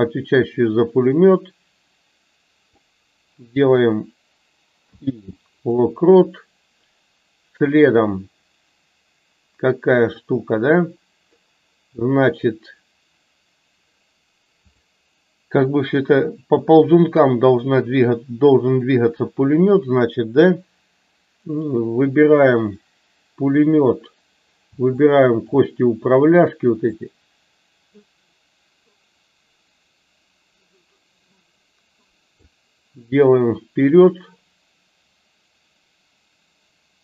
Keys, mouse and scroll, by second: 14.5 click, 24.9-25.5 shift+drag, 27.0-32.5 drag.